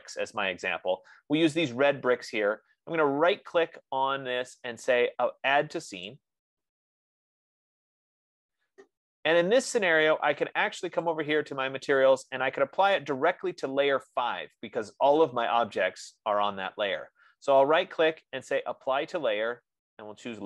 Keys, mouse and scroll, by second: 4.0 right click, 6.5 click, 11.6 click, 17.9 F15, 18.3 right click.